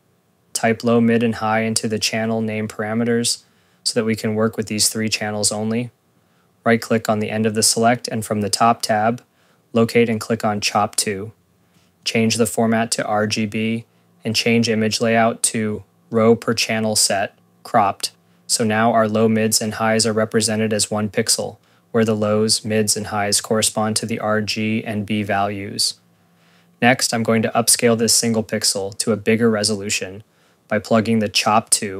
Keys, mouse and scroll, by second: 0.9 click, 4.2 Return, 4.5 click, 5.0 click, 5.5 scroll, 5.7 click, 6.4 ctrl+s, 6.7 right click, 9.4 click, 12.0 click, 18.5 scroll, 20.5 space, 21.8 click, 26.4 right click.